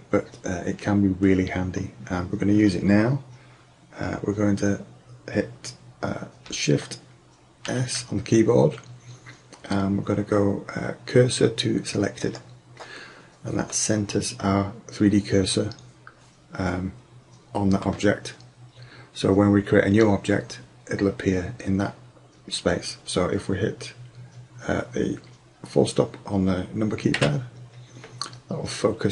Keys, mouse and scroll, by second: 7.7 shift+s, 13.7 click, 13.8 middle click, 13.9 drag, 27.2 KP_Decimal.